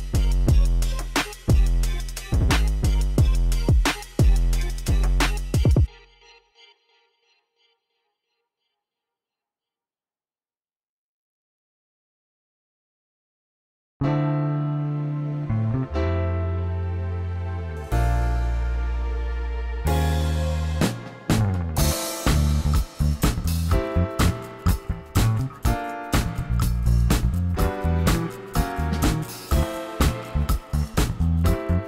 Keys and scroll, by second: 1.8 g, 4.2 r, 7.5 g, 11.5 shift+d, 14.6 r, 20.4 r, 21.8 shift+d, 26.6 shift+d, 31.2 shift+d.